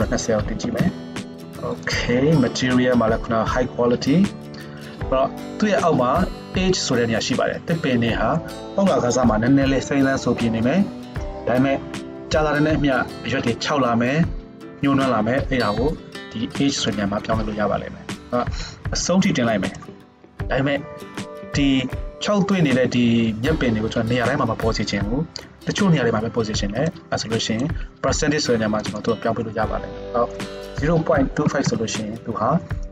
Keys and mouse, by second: 22.1 z, 22.8-28.9 middle drag, 28.9-32.9 drag.